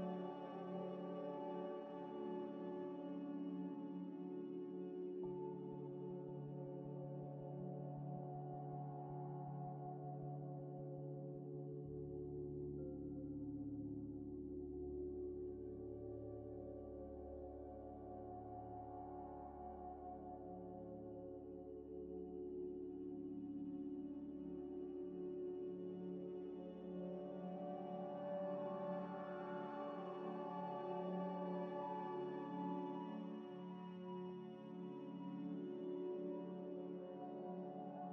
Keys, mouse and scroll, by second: 1.0 middle click, 1.7 F3, 2.5 m, 2.6 i, 2.7 x, 3.3 c, 3.9 Return, 10.8 middle click, 14.2 double click, 28.9 scroll down 1, 29.5 z, 30.1 z, 30.5 z, 31.3 Tab, 32.0-34.2 typing.